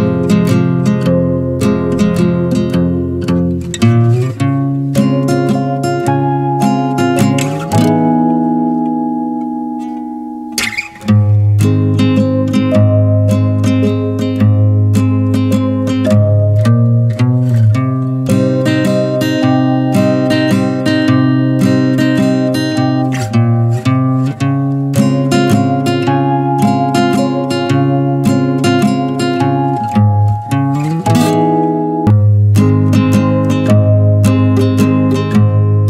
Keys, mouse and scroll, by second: 0.9 drag, 1.2 Tab, 1.5 middle click, 1.8 Tab, 2.1 click, 2.5 Tab, 3.8 m, 6.2-7.4 drag, 7.8 click, 8.6 click, 10.8-13.7 drag, 13.7-15.7 middle drag, 15.7 scroll down 2, 16.0 shift+middle click, 16.9 3, 17.1 click, 17.5-18.6 middle drag, 18.6 n, 19.1 alt+middle click, 19.4 alt+middle click, 19.9-21.4 shift+middle drag, 21.4 click, 23.5 ctrl+z, 24.0 click, 24.9 ctrl+z, 25.5 click, 26.3 middle click, 27.1 e, 28.1 shift+middle click, 28.9 e, 29.8 click, 30.2 alt+shift+click, 31.1 middle click, 31.3 e, 33.4-33.8 middle drag, 33.8 click, 34.2 alt+shift+click, 34.9 middle click, 35.2 e, 35.6 alt+s.